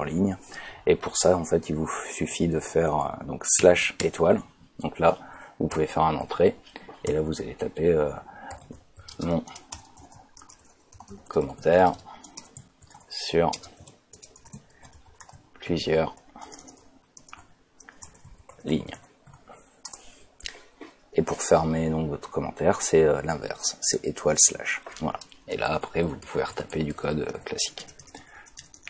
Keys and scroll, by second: 3.6 /, 4.0 *, 6.2 Return, 7.1 shift+Return, 8.3-19.8 typing, 9.7 Return, 12.3 Return, 14.3 Return, 18.0 Return, 19.8 Return, 23.9 *, 24.2 /, 25.5 Return, 25.9-27.8 typing.